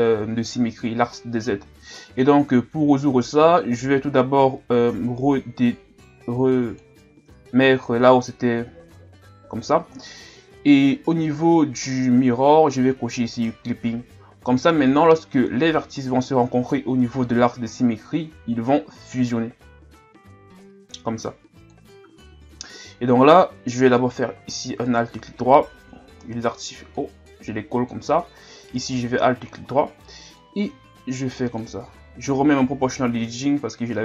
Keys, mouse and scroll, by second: 0.4 scroll down 2, 2.9-4.6 scroll up 2, 4.6 scroll up 1, 4.9-7.4 drag, 7.4-8.6 scroll up 1, 13.3 click, 14.8 click, 15.6 scroll down 2, 16.5-17.8 scroll down 3, 17.8 ctrl+scroll down 1, 19.1-22.1 drag, 22.1 ctrl+z, 24.0-25.8 alt+right drag, 25.8 o, 27.0-28.8 drag, 28.8-30.4 alt+right drag, 30.4-31.9 drag, 31.9 ctrl+z, 32.8 o.